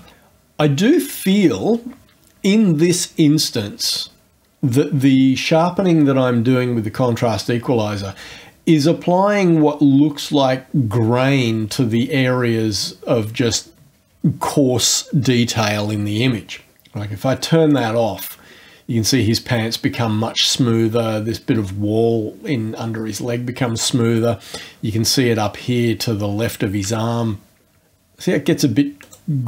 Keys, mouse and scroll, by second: 17.7 click, 29.0 click.